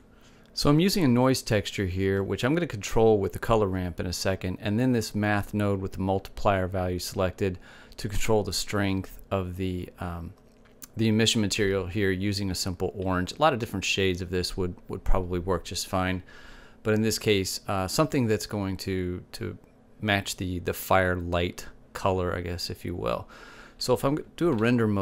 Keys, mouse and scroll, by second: 0.7 middle click.